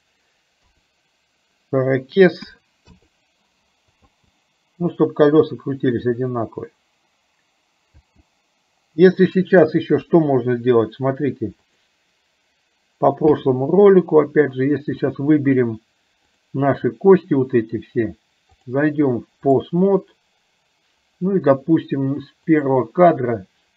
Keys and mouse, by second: 4.3 space, 8.1 space, 10.1 KP_3, 11.7 click, 18.6-19.7 drag, 22.7 click.